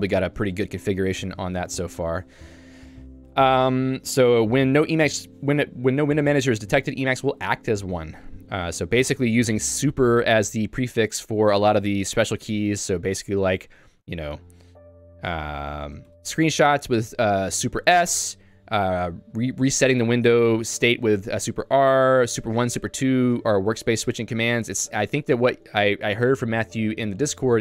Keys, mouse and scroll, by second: 1.0 k, 1.6 ctrl+u, 2.4 k, 6.6 j, 11.0 k, 11.4 j, 13.1 k, 14.3-15.7 typing, 18.1 Escape, 18.5 k, 21.9-23.2 typing, 24.3 k, 25.1 Escape.